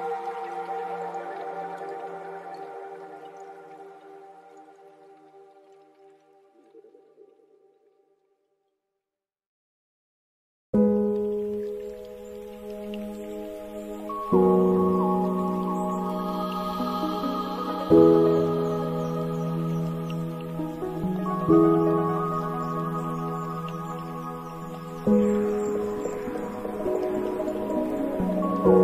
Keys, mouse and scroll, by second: 5.9-11.2 drag, 11.2-12.7 middle drag, 12.7-15.8 drag, 15.9 click, 16.5-17.2 scroll up 2, 17.2-20.3 shift+drag, 22.5 ctrl+z, 23.7-28.4 drag.